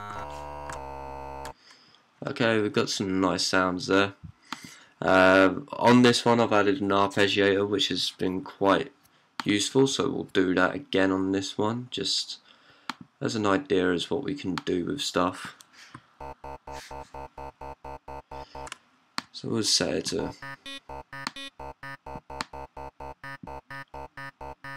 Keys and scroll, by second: 0.0-1.6 typing, 2.6-3.3 typing, 15.8-18.3 typing, 22.0 typing.